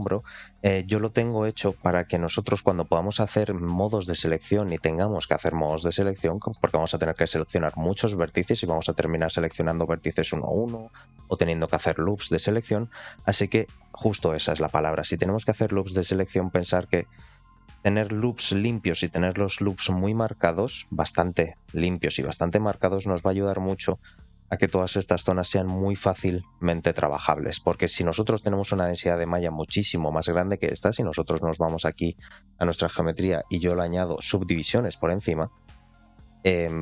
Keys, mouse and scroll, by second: 0.7-1.1 scroll up 2, 4.1-5.6 scroll down 2, 5.6 middle click, 6.4 shift+middle click, 13.2 click, 15.7-16.8 drag, 17.4 click, 18.7 click, 20.4 click, 21.7 click, 22.9 click, 24.2 click, 25.4 click, 31.3 click, 31.7 click, 32.9 click, 33.6 click, 33.9-35.5 drag.